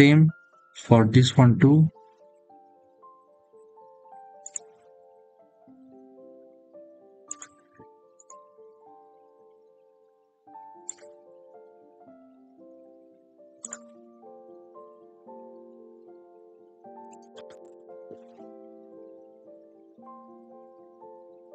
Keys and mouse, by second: 2.6 click, 6.5 click, 7.1 click, 8.0-9.5 drag, 10.7 click, 13.4-19.6 drag.